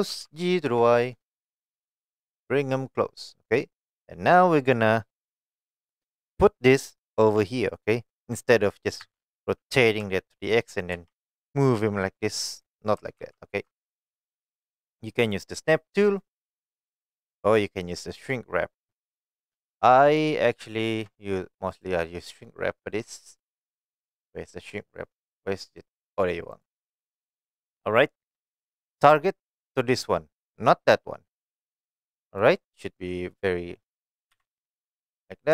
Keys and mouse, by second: 0.1 g, 0.7 y, 3.2 click, 3.6-4.8 middle drag, 9.0 r, 10.0 x, 10.7 click, 10.9 g, 12.6 right click, 13.2 ctrl+z, 13.9-14.3 middle drag, 14.6 click, 19.7 middle click, 20.8 shift+middle click, 21.7-26.6 drag, 29.6 click, 32.4 drag, 32.7-33.3 middle drag, 34.3 KP_1.